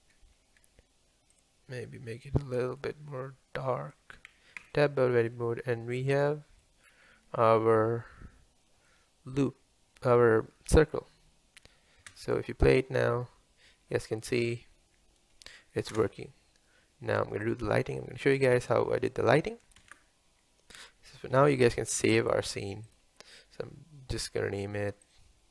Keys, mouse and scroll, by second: 2.8 click, 4.6 Tab, 5.0 scroll down 1, 5.3-6.9 middle drag, 6.9-7.4 scroll down 2, 7.4-12.0 middle drag, 12.0 space, 16.0 space, 17.5 click, 22.0 ctrl+s.